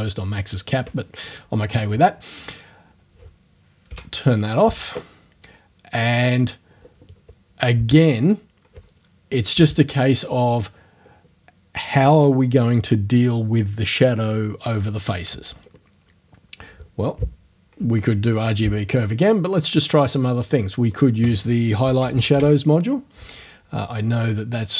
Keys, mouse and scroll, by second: 3.9 o, 20.1 click, 21.0 click, 21.8-22.8 typing.